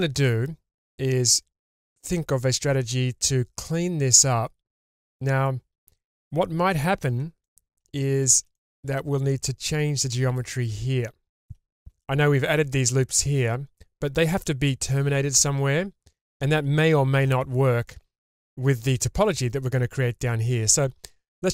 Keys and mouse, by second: 0.2-0.8 middle drag, 6.7 shift+middle drag, 7.4 middle drag, 8.0-8.3 shift+middle drag, 8.6-9.0 middle drag, 11.8 shift+middle drag, 17.9 shift+middle click, 18.4 shift+middle drag.